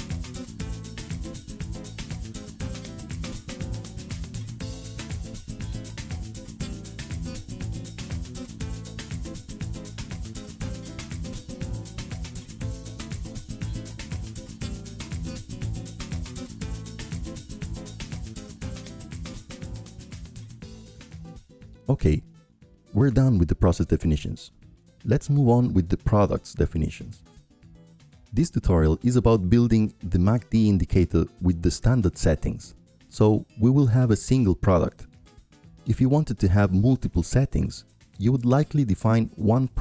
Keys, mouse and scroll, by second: 2.9-5.0 drag, 5.4-8.8 drag, 11.8-16.0 right drag, 16.4-18.4 drag, 20.4-21.5 drag, 23.8-24.9 drag, 26.1-27.2 right drag, 30.1-32.2 drag, 33.9-35.0 drag, 35.3-37.5 drag, 37.7-39.8 drag.